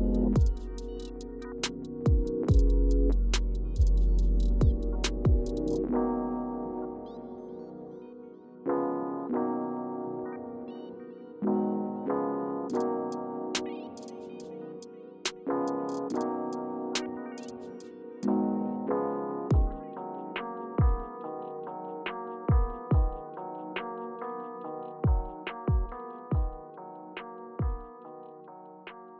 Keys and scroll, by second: 0.0 Return, 0.9 Left, 2.2 Return, 7.7 Return, 10.0 Up, 11.5 Left, 14.5 Right, 15.9 Return, 17.4 Return, 18.5 Left, 18.9 Return, 24.2 Up.